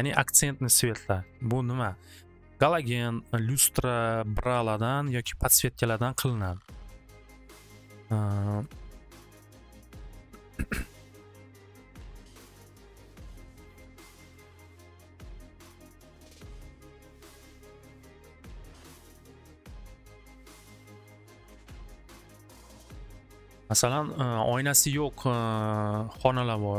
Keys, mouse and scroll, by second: 8.6 click, 9.1 click, 9.7 click, 12.3 click, 12.6 click, 13.6 c, 14.2 click, 14.6 click, 14.9 click, 15.1 click, 15.5 c, 16.4 click, 21.7 click, 21.9 click, 26.2 click.